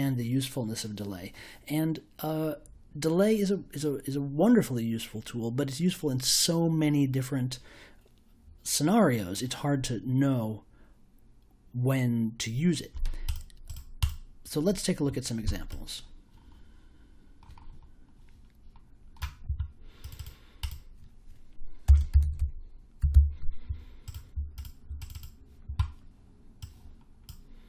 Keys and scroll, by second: 21.8-23.6 typing.